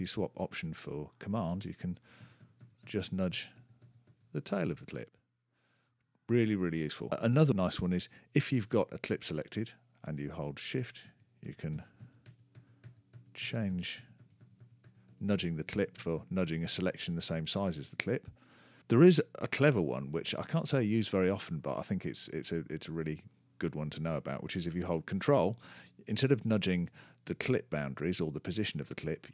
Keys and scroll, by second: 3.0 super+-, 12.2 shift+-, 13.9 shift+=, 14.8 shift+-, 15.7 shift+=, 16.8 shift+-.